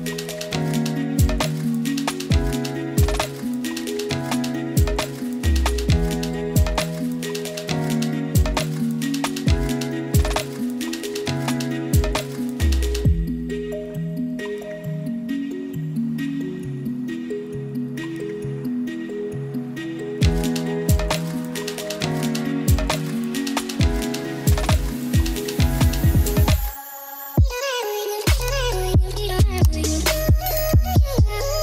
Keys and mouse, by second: 1.2 click, 1.5-3.8 typing, 2.3 click, 4.2 click, 4.4 middle drag, 5.0 shift+d, 5.8-6.2 drag, 6.4 g, 6.9-7.3 drag, 7.4 g, 7.8 click, 8.2 drag, 9.1 shift+d, 10.7 click, 11.0-11.7 drag, 11.8 g, 12.7 drag, 13.3 shift+d, 13.9 click, 14.2-14.7 drag, 14.9-15.3 drag, 15.4 shift+s, 16.3 shift+d, 17.0 click, 17.3-18.7 drag, 18.9 shift+d, 19.5 click, 19.7 middle drag, 19.9 shift+d, 20.7 click, 20.9-21.8 middle drag, 22.1 middle click, 22.3 g, 23.2 drag, 23.7 click, 24.2 click, 24.5 g, 25.2 drag, 25.5 g, 26.2 click, 26.4-27.6 drag, 27.7 g, 28.3 z, 28.8-29.3 drag, 29.5-30.0 drag, 30.3-31.0 drag, 31.5 g.